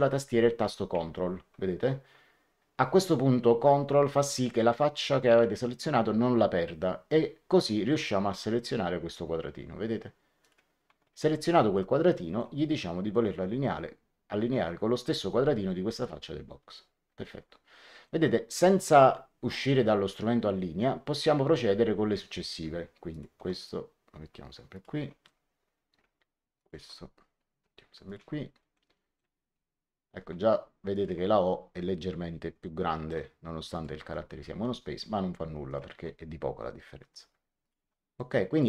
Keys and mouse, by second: 10.4 ctrl+click, 11.7 middle click, 15.9 click, 18.0 middle click, 23.0 ctrl+click, 24.6 ctrl+click, 26.5 ctrl+click, 28.0 ctrl+click, 28.7 middle click, 30.9 ctrl+click, 32.8 right click, 33.6 click, 35.6 ctrl+click, 37.5 ctrl+click, 38.1 middle click.